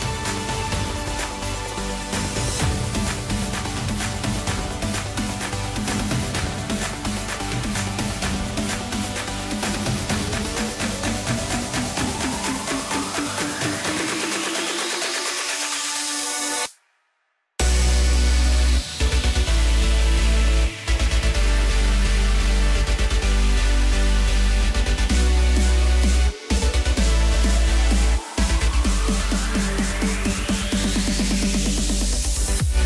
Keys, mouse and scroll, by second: 1.6 click, 2.7 g, 4.9 scroll up 2, 5.1-5.5 scroll down 1, 5.5-6.8 middle drag, 6.8-7.1 scroll down 4, 7.1-8.0 middle drag, 8.0 KP_0, 9.8-10.9 scroll up 1, 10.9 click, 12.0 click, 12.4-13.4 scroll down 2, 13.5 KP_0, 14.4-16.9 middle drag, 16.9-19.9 drag, 20.1-23.1 drag, 23.4-24.0 scroll down 2, 24.3 KP_1, 25.2 g, 27.3 s, 28.3-29.1 scroll up 2, 29.1 s.